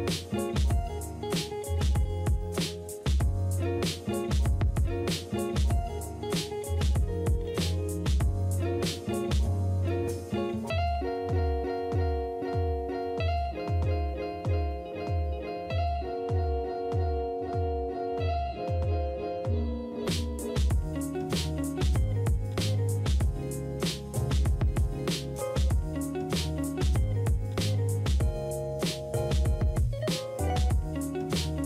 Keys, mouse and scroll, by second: 0.6 space, 5.7 space, 6.5 space, 8.5 space, 9.1 space, 12.0 space, 13.2 space, 15.4 space, 16.5 space, 18.4 ctrl+d, 20.1 ctrl+d.